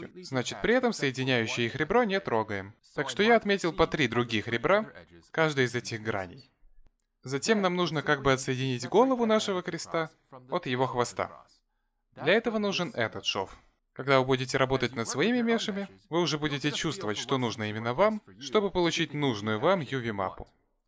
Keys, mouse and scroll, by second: 0.2 middle click, 3.3 click, 4.8 shift+click, 5.2 middle click, 6.3 shift+click, 6.7 middle click, 9.3 a, 13.6 middle click, 15.6 click, 16.5 middle click, 19.4 a, 19.6 middle click.